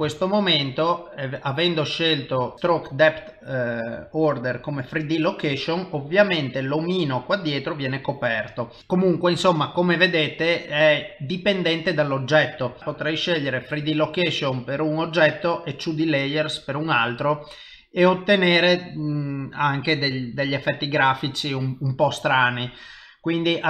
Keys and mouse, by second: 0.1 shift+middle click, 0.8 middle click, 5.8 middle click, 7.4 middle click, 12.7 click, 12.8 click, 12.8 middle click, 13.8 click, 15.1 click, 15.6 middle click, 18.0 middle click, 20.6 middle click.